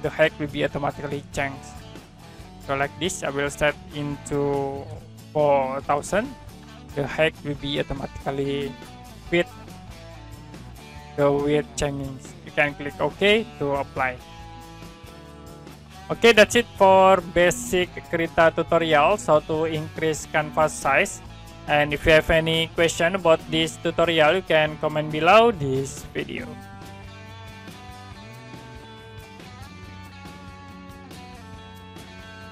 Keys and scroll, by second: 4.8 4, 5.7 0, 22.8 Print, 27.8 Print.